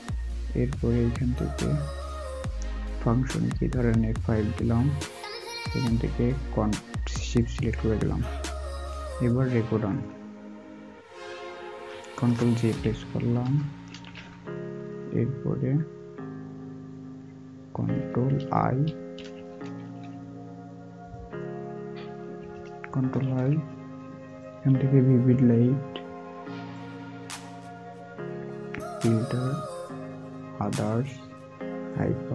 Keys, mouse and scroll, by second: 14.2 ctrl+j, 17.8 ctrl+j, 22.9 ctrl+i.